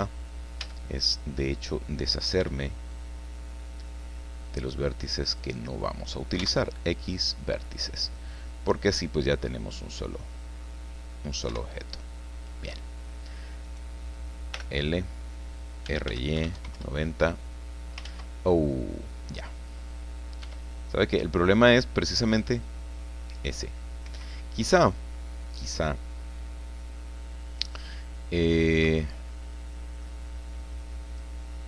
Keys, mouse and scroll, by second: 0.6 a, 2.4 b, 2.9-5.6 drag, 6.4 x, 7.0 click, 8.1-10.8 drag, 11.5 KP_1, 13.6 right click, 14.5 l, 15.6-16.5 typing, 16.7 KP_Enter, 18.0 ctrl+z, 20.4 r, 24.0 Escape, 28.5-30.2 middle drag, 31.0 click.